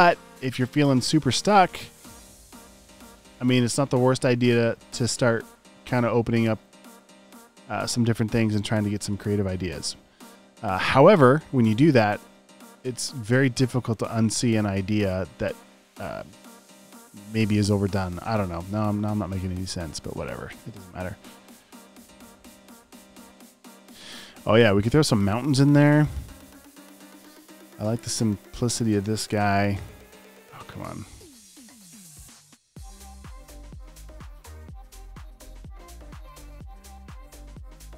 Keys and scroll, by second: 1.3 super+v, 9.2 typing, 36.3 super+v.